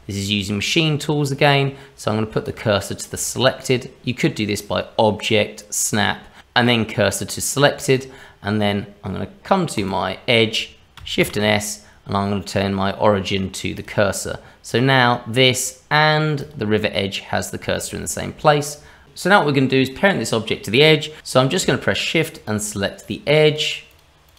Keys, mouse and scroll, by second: 3.2 shift+middle click, 4.6 click, 9.7 click, 11.2 shift+s, 14.6 click, 16.4 click, 17.3 scroll up 2, 17.7 shift+middle click, 18.3-19.0 scroll down 1, 21.2 click, 22.3 shift+click, 22.4 shift+click, 23.0 click, 23.9 shift+click, 24.2 shift+click.